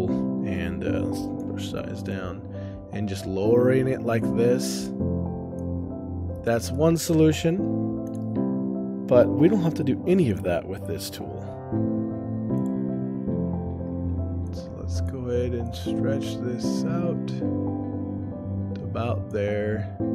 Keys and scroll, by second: 6.4 shift+space, 7.2 o.